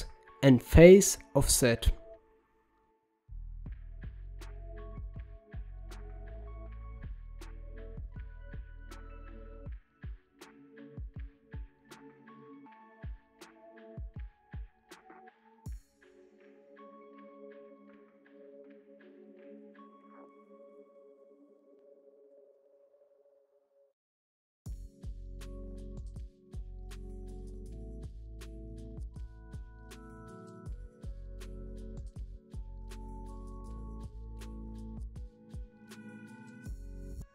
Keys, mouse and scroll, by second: 3.2-6.2 drag, 8.0 click, 10.1-11.3 drag, 12.6-19.2 drag, 20.1 middle click, 20.7 middle click, 21.6-23.4 drag, 23.4 middle click, 24.2-26.6 drag, 26.6-27.7 middle drag, 27.7 click, 28.1 g, 30.2 shift+a, 34.6-35.9 drag, 36.8-37.3 drag.